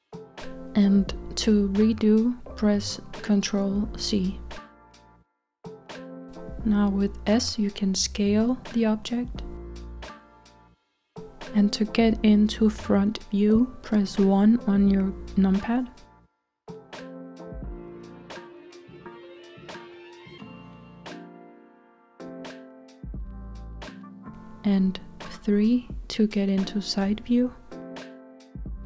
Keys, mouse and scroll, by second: 0.8-3.9 middle drag, 4.0 ctrl+z, 4.8-8.4 middle drag, 8.4 s, 14.7 KP_1, 18.5 s, 27.1 KP_3.